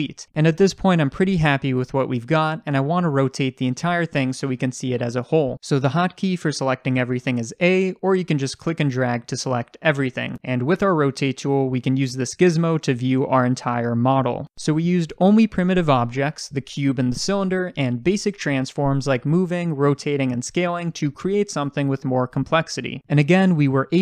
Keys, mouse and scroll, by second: 0.2-5.1 scroll up 2, 5.1-7.5 scroll up 1, 7.5 a, 8.4 click, 8.7-23.0 drag, 21.4 ctrl+z.